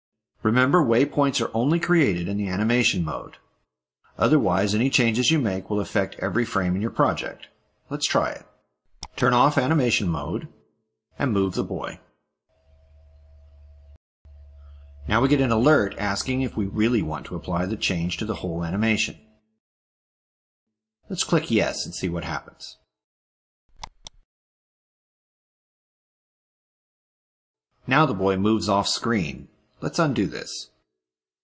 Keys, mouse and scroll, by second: 9.3 click, 12.2 click, 13.4-14.4 drag, 23.7 click, 25.8 click, 26.3 click.